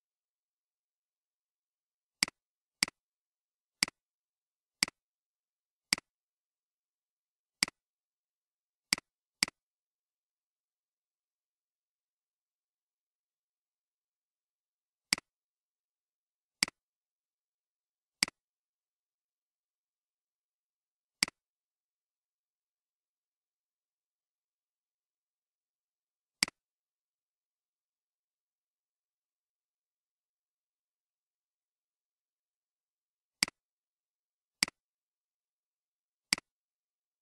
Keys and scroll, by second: 10.5 5, 10.7 5, 11.0 Return.